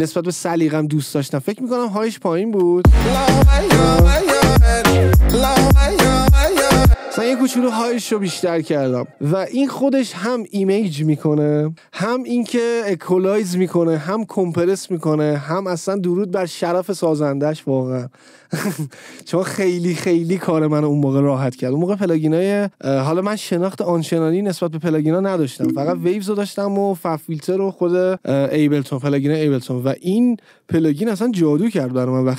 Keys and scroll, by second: 3.0 space, 7.1 space.